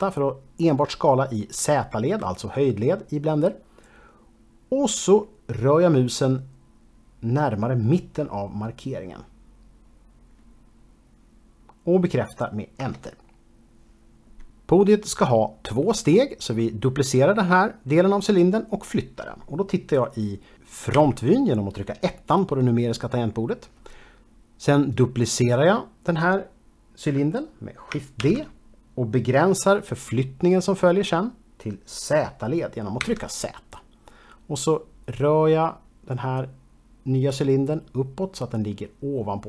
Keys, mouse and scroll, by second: 12.8 Return, 21.0 KP_1, 28.2 shift+d, 33.0 z.